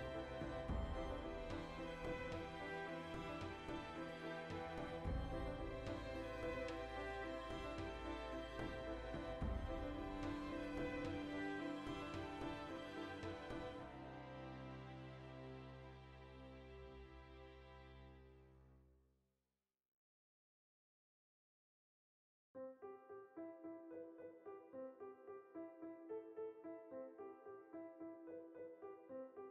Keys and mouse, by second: 0.9 Tab, 1.5 alt+h, 2.0-2.8 right drag, 2.8-3.2 ctrl+middle drag, 3.2 Tab, 3.4-7.9 ctrl+shift+middle drag, 7.9 2, 9.4-10.7 alt+right drag, 10.7-11.7 middle drag, 11.7 alt+shift+right click, 12.2 ctrl+b, 13.4 shift+click, 13.8 Tab, 14.3 ctrl+2, 14.6-17.0 shift+middle drag, 14.9 Tab, 17.0 click, 17.4-19.0 middle drag, 19.0 alt+right click, 19.5 3, 19.7 alt+right click, 20.0-21.6 middle drag, 21.6 alt+shift+right click, 21.8-24.8 middle drag, 24.8 shift+click, 25.3 ctrl+KP_Add, 26.1 middle click, 27.1 click, 27.2 ctrl+z, 27.6 ctrl+KP_Add, 27.9-29.5 middle drag.